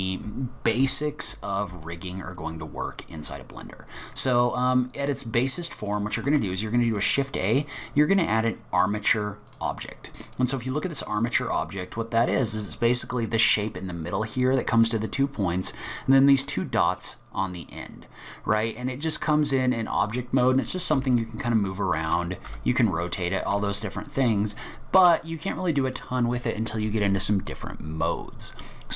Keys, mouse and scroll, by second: 5.4-5.8 scroll up 1, 5.8-6.2 scroll down 2, 6.3 shift+a, 10.4-11.0 scroll down 4, 11.0-11.7 scroll up 1, 20.2-20.6 scroll down 2, 21.0 g, 22.5 r, 24.5 middle click.